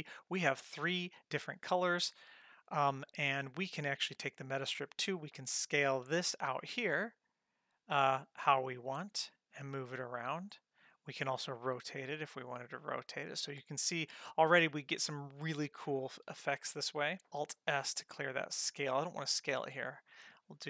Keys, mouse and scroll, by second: 3.9 click, 5.3 s, 9.7 g, 11.3 r, 17.5 alt+s.